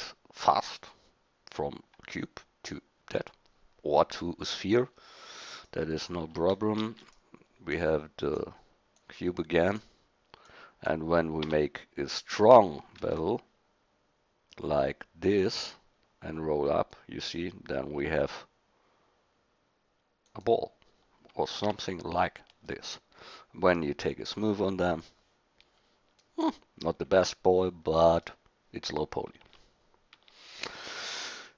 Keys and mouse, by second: 6.8 shift+d, 11.4 Tab, 13.0 ctrl+b, 21.7 Tab, 24.9-26.4 drag, 26.4-26.9 middle drag, 27.1 middle click, 27.4-29.4 middle drag, 29.4 Tab, 30.2 Tab.